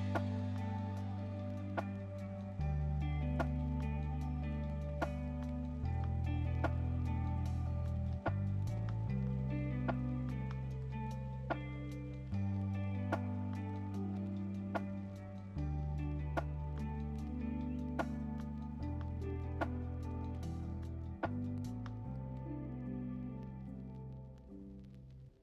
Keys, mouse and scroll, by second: 1.6-4.7 middle drag, 4.7 right click, 5.2 click, 5.7-12.8 middle drag, 12.8 click, 15.3-16.4 middle drag, 16.4 click, 17.0 middle click, 17.5 click, 18.1 middle click, 18.7 Tab, 19.7 ctrl+r, 23.7 ctrl+r.